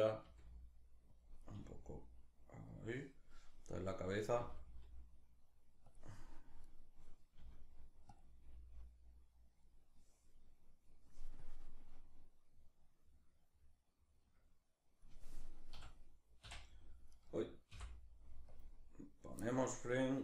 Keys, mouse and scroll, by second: 0.8 click, 1.0 right click, 1.2 r, 2.4 click, 3.5 right click, 4.0 r, 5.6 click, 6.3 right click, 7.0 r, 7.8 click, 7.9 r, 9.2 click, 11.0-16.9 drag, 15.4 s, 16.9 right click, 17.3 i, 19.7-20.2 drag.